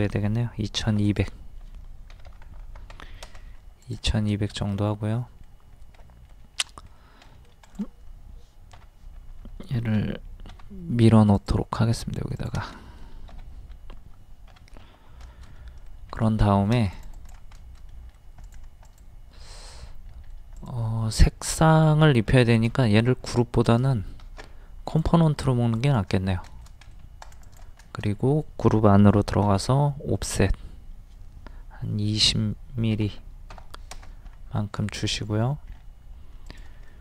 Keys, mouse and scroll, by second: 0.9 d, 1.1 click, 2.1 KP_2, 2.5 KP_0, 3.8 click, 4.3 middle click, 4.7-5.1 scroll up 1, 5.7 scroll up 1, 6.0 middle click, 7.6 click, 8.8 k, 10.5 m, 11.3 click, 12.8-13.9 middle drag, 13.4 m, 14.6 k, 15.3 shift+middle click, 16.1 scroll up 1, 16.4 shift+middle click, 16.9 click, 17.6 shift+middle click, 18.4 click, 19.7 middle click, 20.6 click, 23.0 x, 23.7 right click, 24.9 click, 26.5 middle click, 26.9-27.3 scroll up 1, 27.3 click, 27.8-28.9 shift+middle drag, 29.4 o, 30.3 click, 33.0 KP_2, 33.1 KP_0, 34.8 shift+middle click, 35.7-36.1 scroll up 1, 36.5 click, 36.9 middle click.